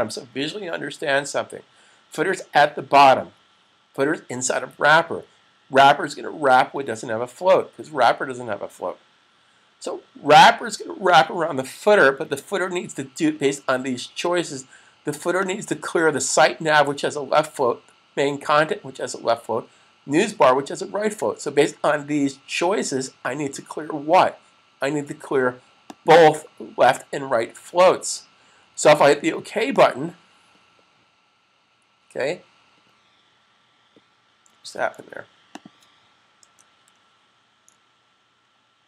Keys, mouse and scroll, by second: 15.4 click, 25.7 click, 29.6 click, 34.4 super+s, 35.4 click.